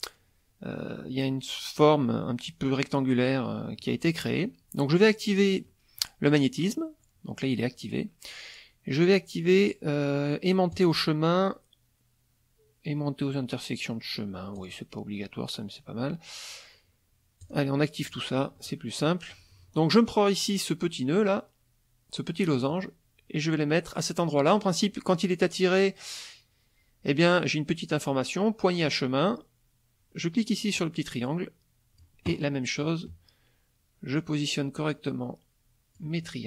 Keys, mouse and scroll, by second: 3.8 middle click, 10.7 click, 14.6 click, 17.4 click, 18.0 click, 18.5 middle click, 19.0 middle click, 22.7-29.0 drag, 30.8-32.2 drag, 34.1-36.1 drag, 36.2 middle click.